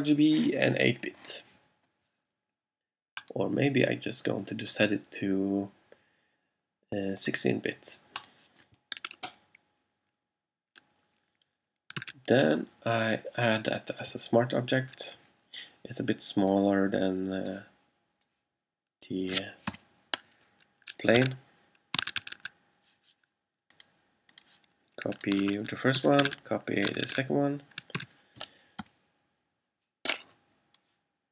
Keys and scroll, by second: 12.0 super+v, 19.8 Return, 21.2 super+Tab, 25.6 super+a, 26.0 super+c, 26.3 super+Tab, 28.1 super+v, 28.9 super+Return.